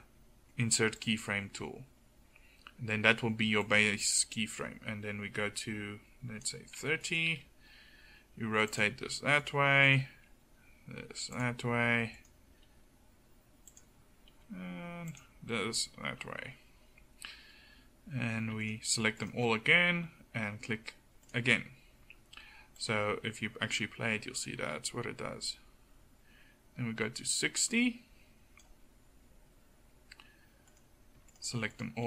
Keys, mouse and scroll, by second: 5.4-7.0 middle drag, 7.3 r, 10.2 r, 12.5 r, 14.3-17.7 middle drag, 14.3 r, 17.9 middle click, 24.7 middle click, 26.1-30.7 drag.